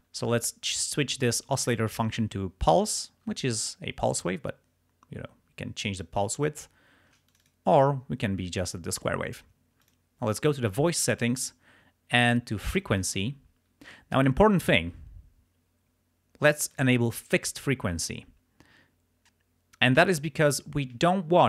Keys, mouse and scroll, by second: 4.2-6.2 drag, 7.3 shift+click, 9.8 click, 12.7 click, 16.7 click.